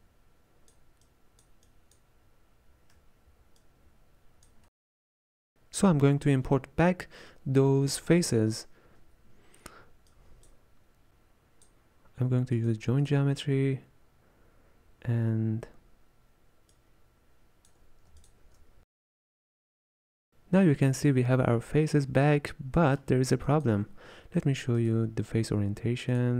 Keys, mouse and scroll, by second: 0.0-11.7 drag, 16.7-17.8 drag, 18.2 alt+shift+click, 23.5-24.8 drag.